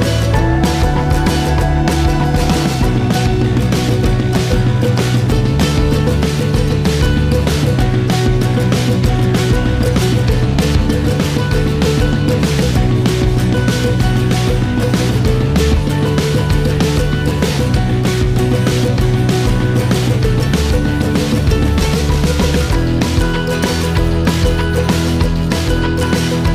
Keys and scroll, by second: 1.6 Return, 1.6 typing, 3.4 typing, 4.0 Return, 7.4 typing, 7.9 Return.